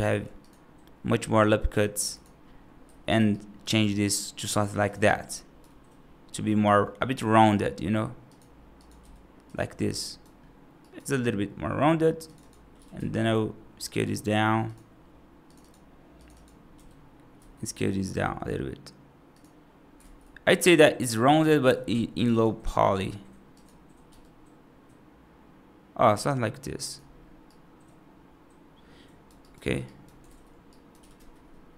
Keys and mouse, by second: 2.7 1, 3.0 click, 3.2 right click, 3.6 g, 4.9 alt+right click, 6.1 right click, 6.7 middle click, 8.8 g, 9.9 right click, 10.7 right click, 12.2 click, 12.6 g, 15.4 click, 16.0 click, 16.2 click, 16.6 g, 19.9 ctrl+z, 20.5 click, 21.1 g, 22.0 click, 22.2 click, 23.5 click, 23.9 g, 27.3-29.1 right drag, 29.3 right click, 29.7 right click, 30.1 ctrl+z, 30.5 right click, 30.9 g.